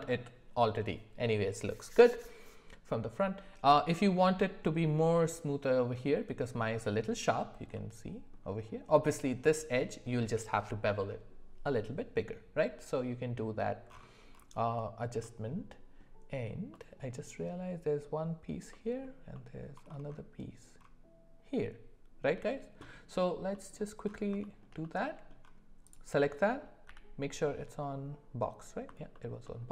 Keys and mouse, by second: 7.8 middle click, 23.6 middle click, 24.4 shift+middle click, 24.8 middle click, 26.4 middle click, 26.9 d.